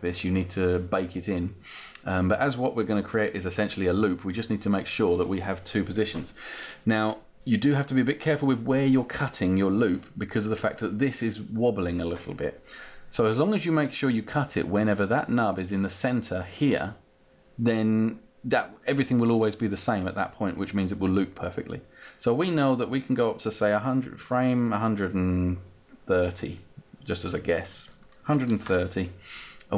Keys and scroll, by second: 27.7-28.6 typing.